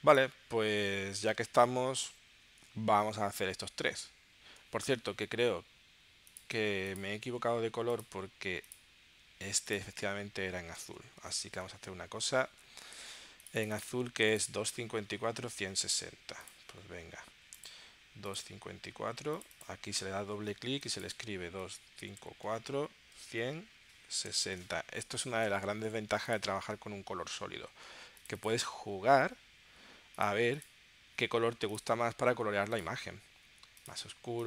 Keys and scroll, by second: 2.6 super+Tab, 9.9 space, 10.8 space, 11.6 super+Tab, 15.5 super+Tab, 21.6 2, 22.0 5, 22.2 4, 22.4 Tab, 23.2 Tab, 24.3 6, 24.5 0.